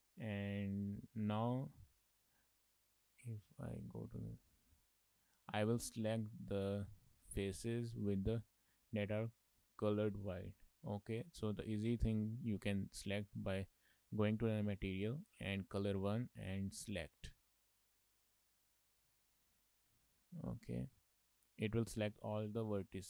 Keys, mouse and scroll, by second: 0.5 shift+middle click, 0.8 middle click, 1.3-1.9 scroll up 5, 1.9 shift+middle click, 2.2 middle click, 3.6 click, 4.3 shift+middle click, 5.0 click, 5.9 middle click, 13.1 click, 16.2 click, 17.3 shift+middle click, 17.6 middle click, 18.4-19.1 scroll down 11, 19.1 shift+middle click, 19.4 middle click, 19.9-20.7 scroll up 6, 22.9 scroll down 2.